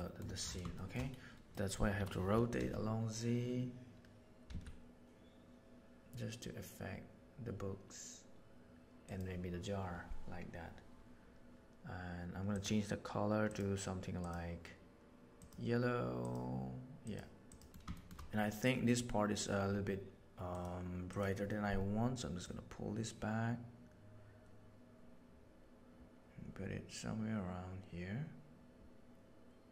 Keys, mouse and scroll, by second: 0.7 shift+middle click, 1.5 middle click, 1.9 r, 13.4 click, 14.1 click, 17.9 shift+middle click, 20.5 right click, 22.5-25.4 right drag.